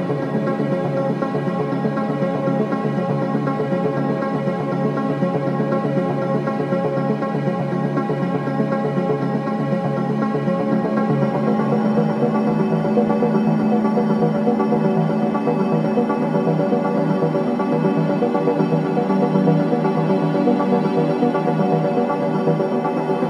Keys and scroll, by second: 1.5 4, 5.2 3, 10.0 ctrl+d, 10.0 Escape.